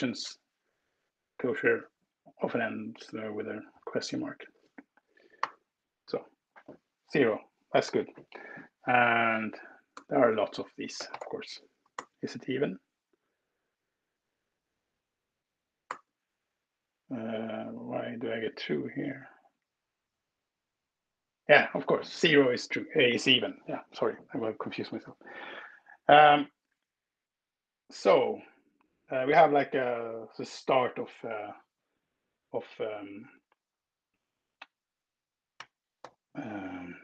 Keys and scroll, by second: 5.1 alt+Return, 9.3 Left, 9.7-11.4 typing, 11.7 alt+Return, 14.5 Escape, 15.7 alt+Return, 28.1 alt+Up, 35.5 ctrl+alt+p, 35.9 ctrl+alt+r.